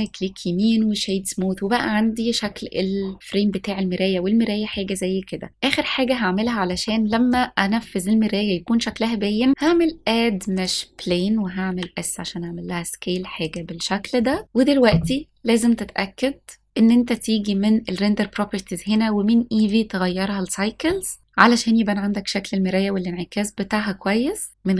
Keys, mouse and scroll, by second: 1.1 click, 2.5-4.8 middle drag, 4.2 r, 5.1-5.8 scroll down 2, 5.5 middle click, 6.5 shift+middle click, 7.1 middle click, 7.8-8.2 scroll up 1, 9.6-11.7 drag, 11.7 s, 13.5 click, 14.4 click, 17.2 click, 18.9 click.